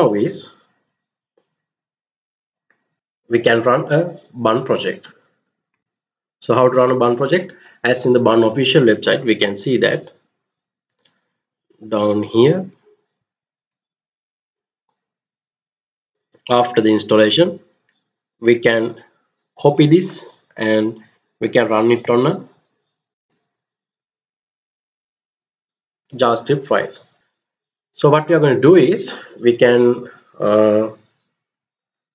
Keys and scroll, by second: 5.3 alt+Tab, 25.7 ctrl+c, 27.1 alt+Tab.